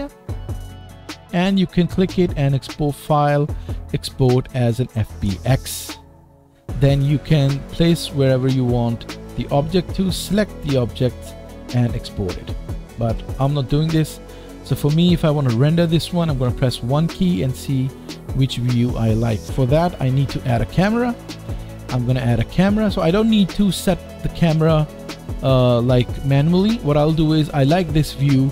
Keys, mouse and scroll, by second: 0.1-3.1 middle drag, 2.0 click, 3.1-14.4 drag, 14.4 middle click, 16.3 KP_1, 17.3 middle click, 20.3 shift+a, 23.8-25.6 middle drag, 25.3-25.7 scroll up 3, 25.8-28.5 right drag, 25.9-27.5 scroll down 1.